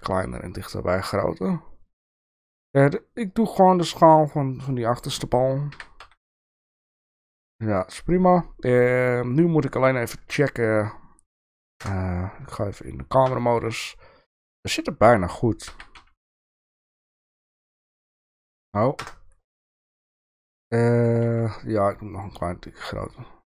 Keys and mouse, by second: 5.7 g, 10.2 KP_Enter, 11.8 KP_0, 13.4 shift+middle click, 14.3 shift+middle click, 15.7 g, 18.1 middle click, 19.0 KP_0, 20.0 shift+middle click, 21.3 s.